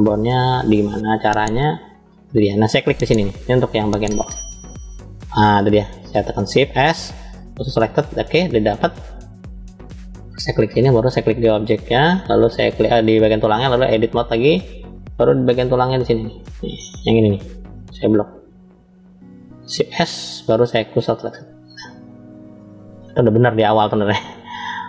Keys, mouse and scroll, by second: 3.2 middle click, 4.6 alt+click, 6.4 shift+s, 9.6-10.3 drag, 11.4 click, 13.3-14.0 drag, 14.8-17.4 middle drag, 18.1 click, 19.8 shift+s, 22.1-22.7 scroll down 2, 22.7-23.7 middle drag, 23.9-24.7 scroll down 1.